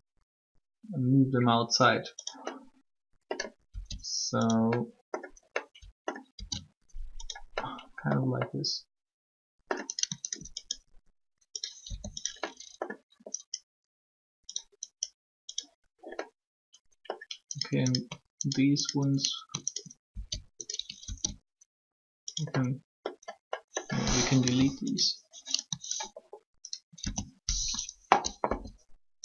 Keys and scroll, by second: 3.6 s, 11.8 r, 24.3 Delete, 27.7 shift+3, 28.4 1.